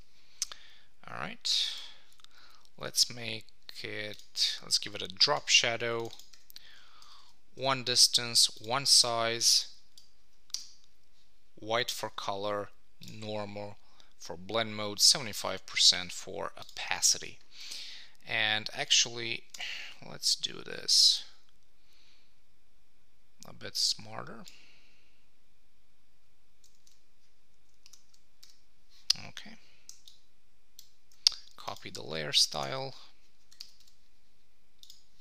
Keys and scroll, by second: 7.0 Tab, 26.8 super+v, 27.8 super+Return, 33.6 Return.